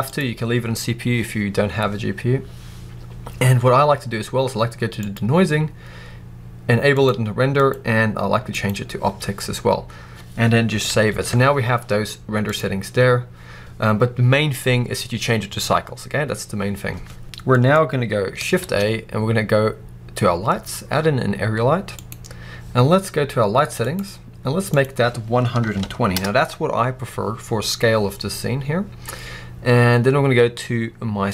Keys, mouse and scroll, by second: 7.4-17.4 drag, 9.6-10.8 scroll up 1, 10.8 ctrl+s, 17.4-23.7 middle drag, 18.5 shift+a, 23.7 click, 24.6-31.3 drag, 26.1 Return.